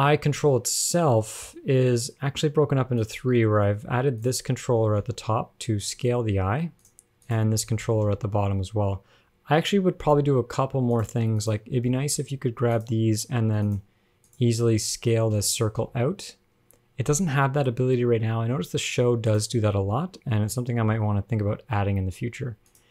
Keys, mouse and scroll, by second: 0.0 g, 1.5 scroll down 4, 1.7 middle click, 2.2 scroll up 1, 3.2 click, 4.4 click, 5.1 g, 7.4 click, 8.1 g, 11.7 click, 12.4 g, 13.8 click, 14.5 click, 15.6 s, 20.1 a, 21.1 alt+r, 21.2 alt+g, 21.6 alt+s, 22.2-22.9 scroll down 1.